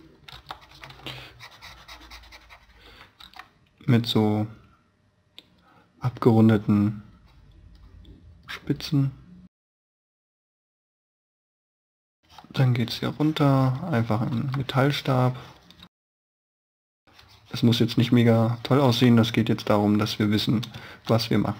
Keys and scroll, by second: 0.2 e, 1.1 e, 3.1 b, 3.9 b, 11.6 space, 14.2 e, 15.7 space, 16.0 b, 16.8 space, 19.0 e, 20.8 space.